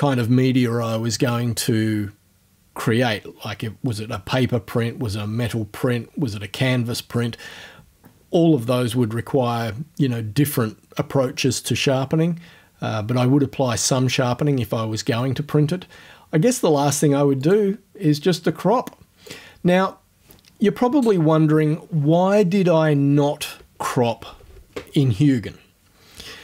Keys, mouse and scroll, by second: 17.4 click, 19.3 click.